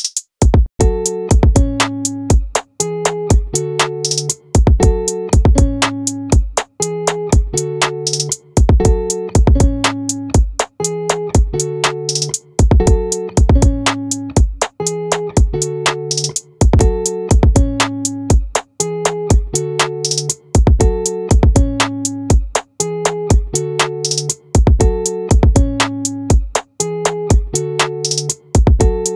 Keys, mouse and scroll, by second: 0.1 z, 7.3-10.2 drag, 8.5 right click, 24.0-29.1 right drag.